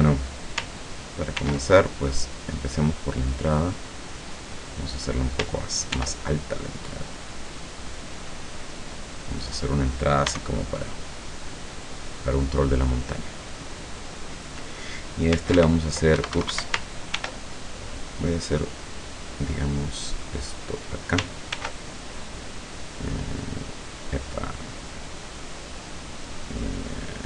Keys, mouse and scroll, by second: 1.4 ctrl+r, 2.2 click, 4.8 click, 5.9 ctrl+r, 6.7 middle click, 6.7 scroll up 2, 7.3 click, 7.9 click, 9.0 click, 9.5 right click, 10.3 e, 11.5 click, 11.9-13.0 middle drag, 15.6 ctrl+r, 16.2 Escape, 18.3 click, 20.8 click, 21.6 ctrl+r, 22.8 click.